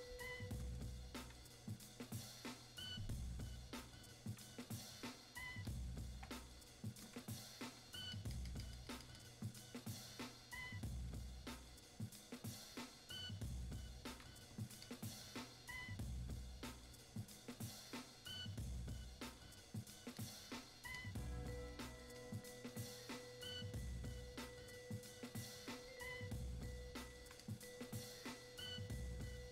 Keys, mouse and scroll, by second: 0.3 click, 4.5-29.5 drag.